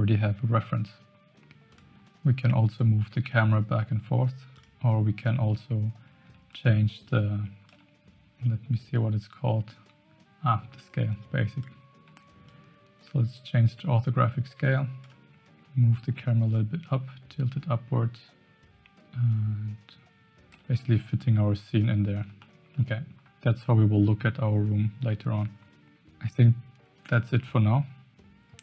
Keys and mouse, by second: 1.6 click, 4.5 click, 6.5-7.7 shift+drag, 9.2-11.6 drag, 12.4-15.1 shift+drag, 16.5-20.5 shift+drag, 22.4-22.8 shift+middle drag.